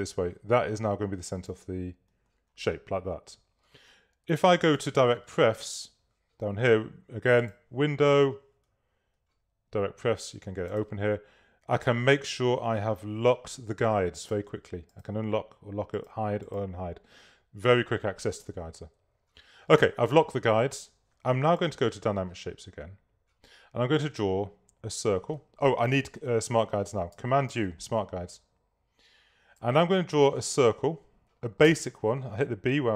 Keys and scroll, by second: 27.5 super+u, 31.8 b.